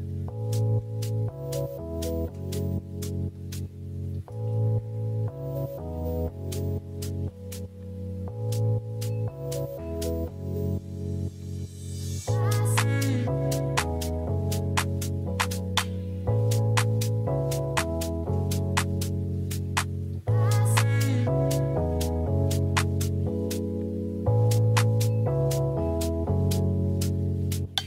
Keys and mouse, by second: 0.4 KP_0, 2.1 click, 2.7-3.1 drag, 5.4 r, 5.6 x, 5.9 x, 9.7 shift+middle click, 12.4 r, 12.6 x, 12.8 x, 16.0 click, 17.7-19.3 drag, 21.2 click, 22.0-23.7 drag, 24.1-25.6 middle drag, 26.0 click, 26.5 middle drag, 27.1 KP_0.